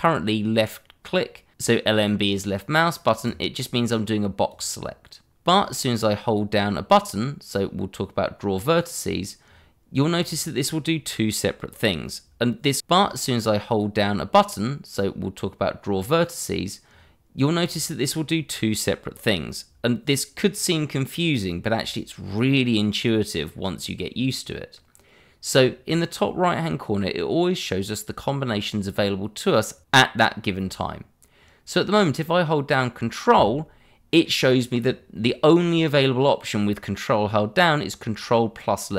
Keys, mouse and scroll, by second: 3.2 click.